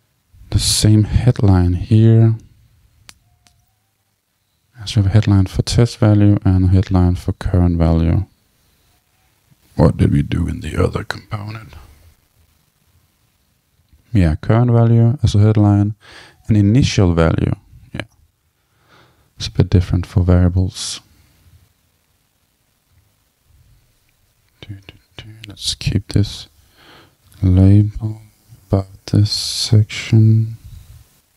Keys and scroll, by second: 27.3 super+c, 29.5 super+v.